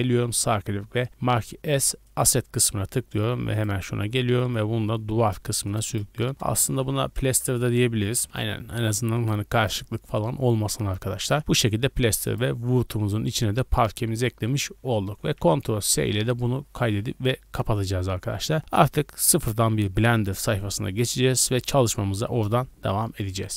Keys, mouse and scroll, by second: 3.5 click, 4.4 click, 5.6 click, 5.9-8.3 drag, 7.4 BackSpace, 9.2 click, 9.5 click, 12.2 click, 15.4 ctrl+s.